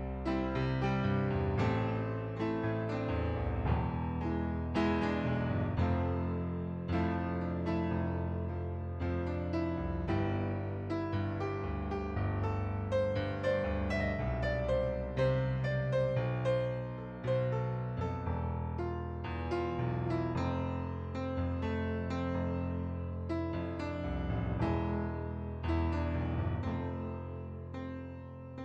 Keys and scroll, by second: 7.9 ctrl+z, 8.1 ctrl+z, 8.4 ctrl+z, 11.3 ctrl+d, 23.0 ctrl+d, 23.4 ctrl+d, 23.7 ctrl+d.